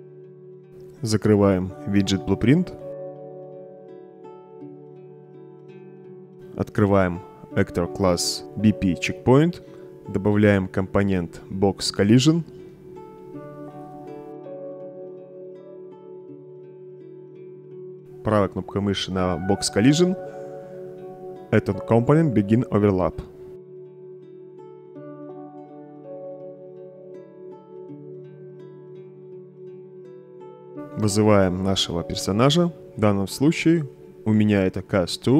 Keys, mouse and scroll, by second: 4.0 middle click, 5.7 click, 7.7 click, 7.9 click, 11.2 click, 12.4-13.6 typing, 14.5 click, 17.0 click, 17.7 click, 18.4 right click, 22.0 click, 23.3 right click, 23.8 middle click, 24.3 click, 26.3-27.7 right drag, 29.6-30.2 right drag, 32.1-32.7 drag, 33.1-35.3 typing.